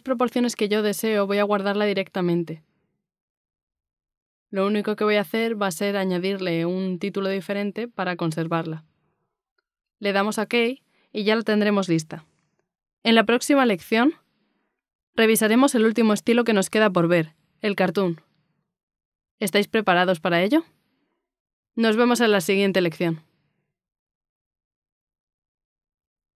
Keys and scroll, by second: 2.7 space, 3.8-5.7 typing.